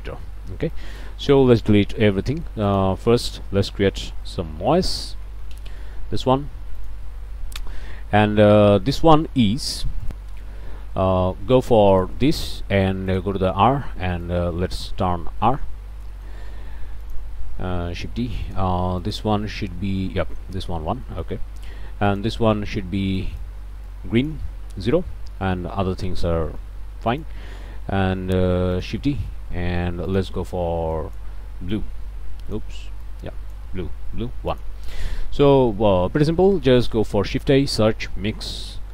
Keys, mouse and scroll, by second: 0.7 click, 1.3 Delete, 1.5 click, 1.9-2.3 scroll down 1, 2.3 click, 3.0 shift+a, 3.2 shift+click, 4.3 n, 4.4 o, 4.6 i, 4.7 s, 5.3 Down, 5.5 Return, 6.8 click, 10.0 click, 11.9 click, 13.1 click, 14.2 click, 15.4 middle click, 15.7 scroll down 1, 16.1 middle click, 17.0 click, 17.9 shift+d, 18.5 shift+click, 19.0 click, 21.1 middle click, 22.1 click, 23.2 click, 23.9 click, 26.2 click, 26.5 middle click, 27.1 shift+click, 27.9 shift+d, 28.8 click, 30.1 click, 30.9 click, 31.7-32.8 drag, 33.0 click, 34.5 click, 35.1 click, 35.7 click, 36.3 click, 36.8 shift+click, 37.1 shift+a, 37.3 shift+click, 38.3 m, 38.4 i, 38.6 x.